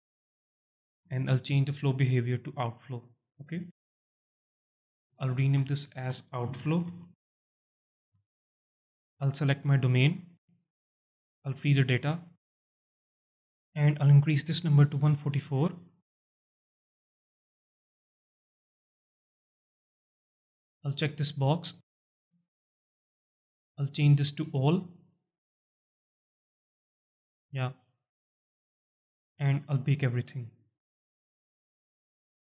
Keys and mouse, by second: 0.3 click, 0.7 shift+click, 0.8 alt+shift+middle click, 1.7-2.8 drag, 4.2 alt+shift+middle drag, 5.5 F2, 9.4-11.9 drag, 14.4-18.2 drag, 16.0 KP_4, 21.2-22.2 drag, 24.1-25.0 drag, 30.3-32.4 drag.